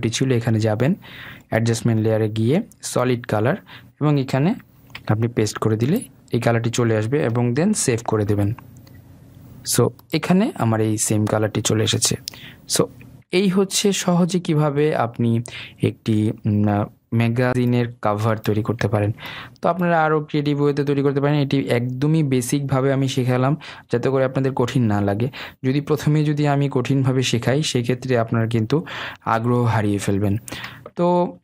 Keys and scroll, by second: 6.3 ctrl+v, 9.1 ctrl+s.